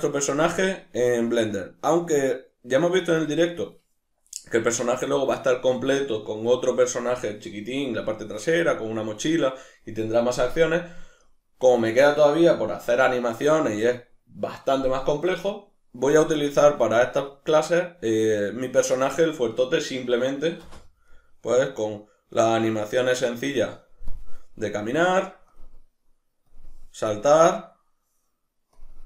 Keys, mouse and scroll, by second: 1.6 ctrl+middle click, 9.1 middle click, 13.1-14.3 middle drag, 16.3 middle click, 20.6 space, 20.8-21.7 middle drag, 22.9-24.1 middle drag, 24.1 drag, 25.5 click, 28.7 click.